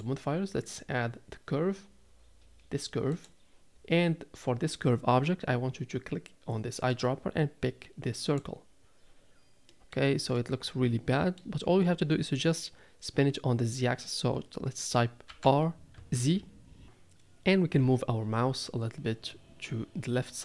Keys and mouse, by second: 9.7 middle drag, 10.4-11.4 middle drag, 15.3 r.